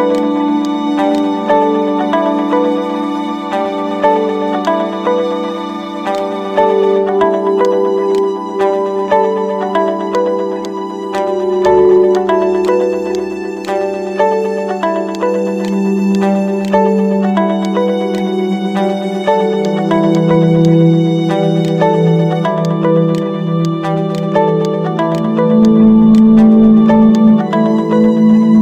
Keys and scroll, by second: 1.3-2.9 typing.